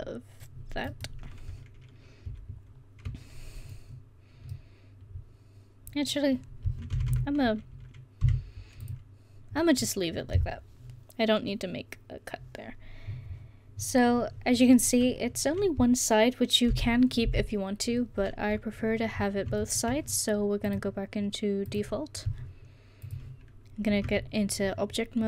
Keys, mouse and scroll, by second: 4.2-7.0 middle drag, 7.0 a, 7.1 a, 8.3 u, 16.9 KP_1, 17.3 KP_1, 24.0 Tab.